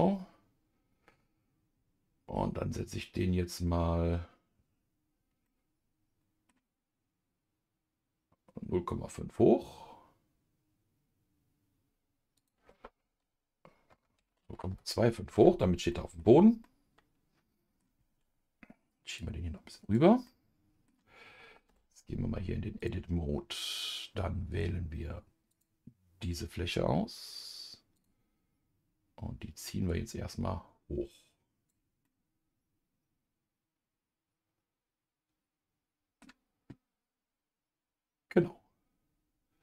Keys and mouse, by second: 5.4-6.5 middle drag, 12.3-15.9 drag, 15.9 middle click, 16.6-17.8 middle drag, 19.2-20.2 drag, 20.2 middle click, 21.9 Tab, 22.8 click, 24.6 click, 25.5 click, 28.0-30.0 drag, 30.4-32.0 drag, 32.0-36.2 middle drag.